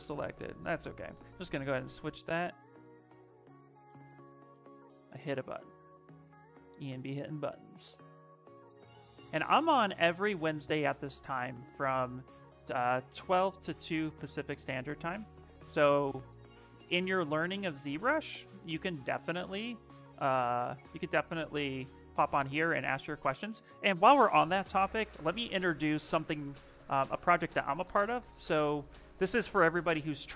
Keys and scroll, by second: 0.9 v, 2.5 ctrl+z, 2.7 ctrl+z, 3.8 space.